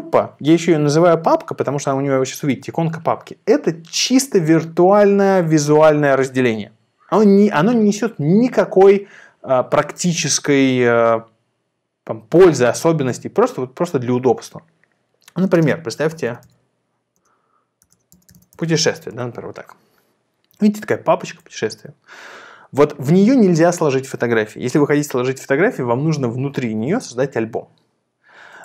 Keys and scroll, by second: 15.9-19.0 typing, 19.2 Return.